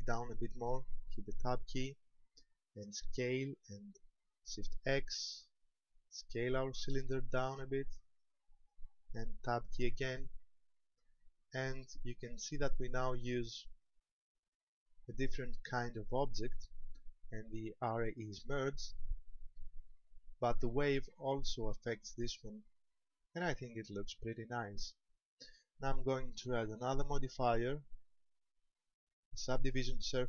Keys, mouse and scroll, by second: 1.5 Tab, 3.0 s, 8.2 ctrl+click, 9.6 Tab, 10.4-11.0 scroll down 3, 11.1 middle click, 19.9 shift+middle click, 20.8 scroll down 2, 26.7 click.